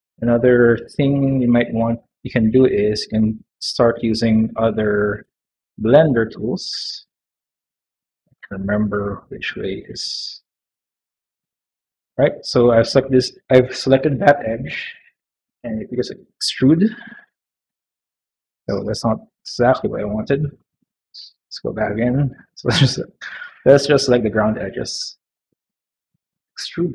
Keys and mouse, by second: 0.0 middle click, 0.4 shift+middle click, 1.6 middle click, 2.4 2, 3.4 click, 4.5 shift+click, 5.3 click, 6.4 ctrl+alt+click, 7.1 click, 8.5 ctrl+alt+click, 9.4 click, 10.9 alt+click, 11.9 middle click, 15.4 e, 20.3 ctrl+z, 20.6 ctrl+z, 20.8 ctrl+z, 21.6 click, 22.1 shift+click, 23.5 shift+click, 24.4 shift+click, 25.0 shift+click, 25.6 shift+click, 26.8 e.